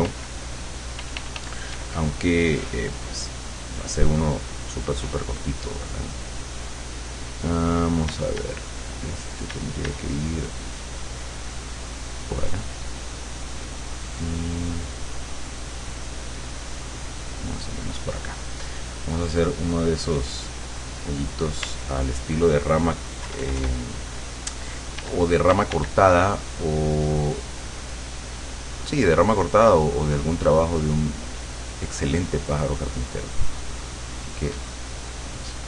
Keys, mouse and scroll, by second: 1.0 f, 1.8 d, 3.2-5.2 drag, 8.2 d, 9.6 d, 10.3 click, 15.7 click, 16.4 click, 17.4 click, 19.4 click, 20.7 click, 21.6 d, 23.3 KP_Add, 25.0 d, 26.2-35.6 drag.